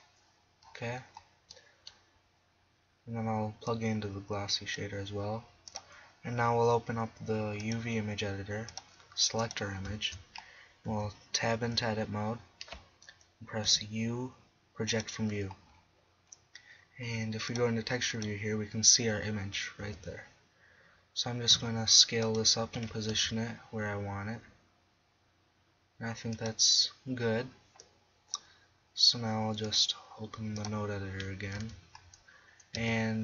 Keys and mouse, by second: 5.5 click, 7.5-8.3 drag, 8.7 click, 10.9 Tab, 11.6 a, 13.7 u, 15.7-16.9 drag, 18.0 click, 18.4 click, 19.9 s, 22.8 g, 24.2 click, 28.5-29.7 middle drag, 31.5 middle click, 31.6 Tab, 32.8 Tab.